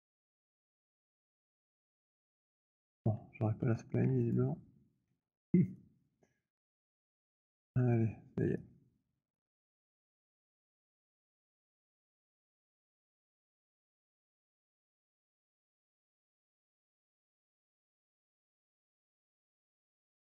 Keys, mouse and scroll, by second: 0.1 z, 0.8 click, 2.2 z, 4.4 click, 5.2 z, 6.1 click, 6.9 shift+click, 9.7 right click, 11.5 right click, 15.0 right click, 16.0 right click, 18.8 right click.